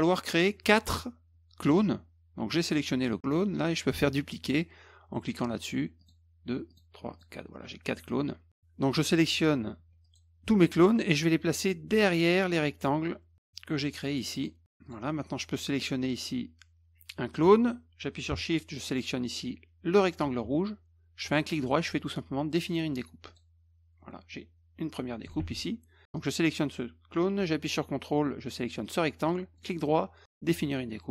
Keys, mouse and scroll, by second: 6.0 click, 6.7 click, 7.1 click, 8.9 click, 10.0 shift+click, 11.3-12.8 drag, 13.9 click, 14.3 click, 14.8 click, 16.0 click, 18.9 shift+click, 21.2 right click, 23.3 click, 24.3-25.2 drag, 25.4 ctrl+z, 26.1 click, 28.8 ctrl+click, 29.6 right click, 30.5 click.